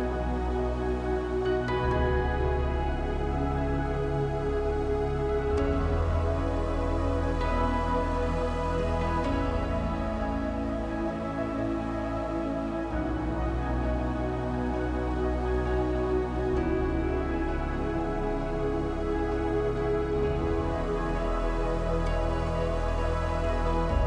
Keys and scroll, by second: 5.6 space, 5.9 l, 8.1 e, 11.6 space, 12.6 a, 18.1 e, 23.0 shift+space.